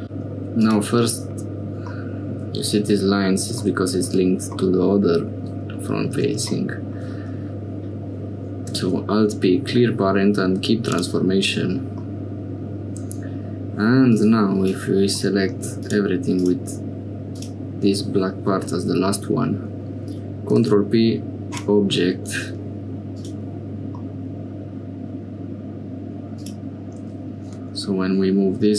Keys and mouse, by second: 0.0 g, 1.9 middle click, 3.6 middle click, 4.6 middle click, 8.6 alt+p, 12.0 middle click, 14.0 click, 15.2 click, 19.1 click, 20.4 ctrl+p, 23.1 click, 24.0-25.9 middle drag, 26.3 click, 27.4 g.